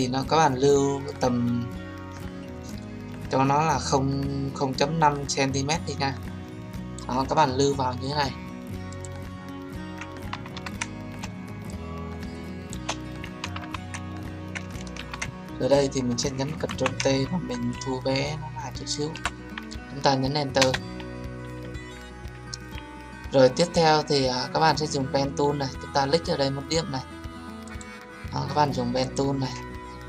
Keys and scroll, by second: 14.9 ctrl+d, 16.6 ctrl+t, 20.5 Return.